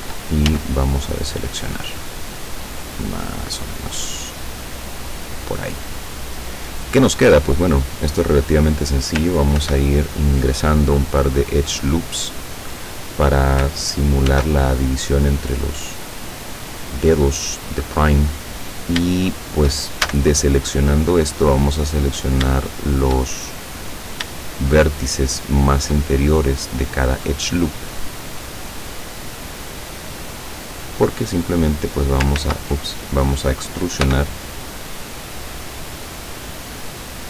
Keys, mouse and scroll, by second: 0.5 a, 1.2-6.3 middle drag, 6.3-7.2 scroll down 1, 7.2-7.5 scroll up 1, 7.5-8.5 scroll down 1, 9.6 ctrl+r, 10.5 click, 12.7 click, 14.3 ctrl+r, 14.9 ctrl+click, 16.6 click, 18.7-19.0 scroll up 2, 19.3 shift+click, 19.3 shift+middle click, 20.1 shift+a, 22.2 right click, 22.9 shift+right click, 23.3-24.4 shift+middle drag, 24.8 shift+right click, 25.7 shift+right click, 26.2-30.4 shift+middle drag, 31.1 click, 32.4 ctrl+z, 34.1 e.